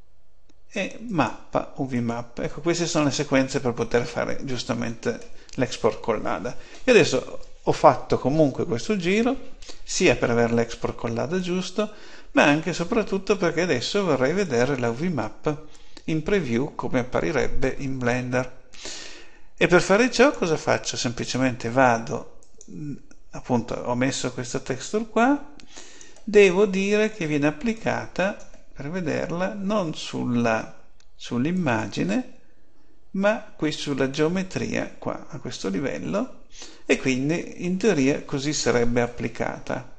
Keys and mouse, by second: 1.0-2.8 drag, 11.3-13.0 drag, 19.8-24.2 drag, 24.8-26.6 drag, 27.6-29.5 drag, 31.4-38.8 drag.